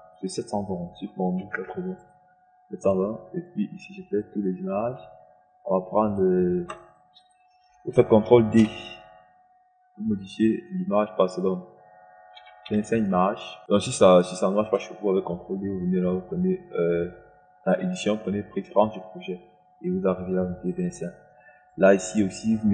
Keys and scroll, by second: 1.4 KP_7, 1.8 KP_2, 2.1 KP_0, 9.2 ctrl+d, 12.8 KP_2, 13.1 KP_5.